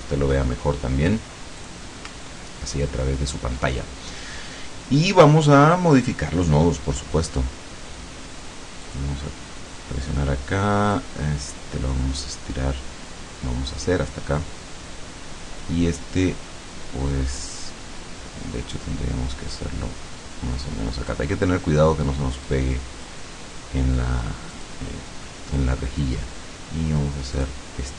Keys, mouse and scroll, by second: 1.6 click, 2.3-3.0 ctrl+scroll up 4, 8.9 click, 11.0-14.1 drag, 17.6-21.4 drag, 22.5 click, 24.6 click, 27.4 click.